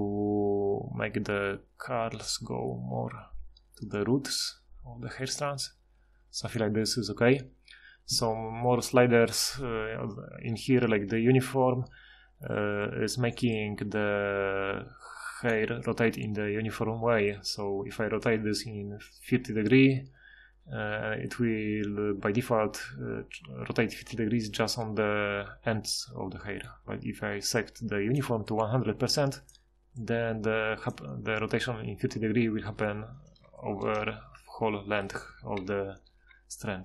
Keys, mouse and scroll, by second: 36.2 F6.